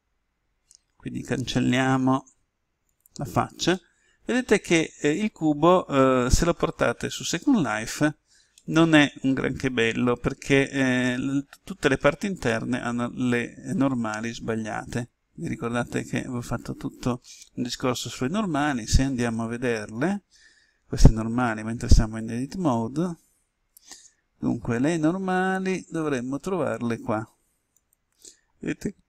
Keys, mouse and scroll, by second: 1.1 Delete, 2.9 click, 3.6-14.6 middle drag, 17.6 n, 20.1-22.0 scroll down 1, 27.7-29.0 drag.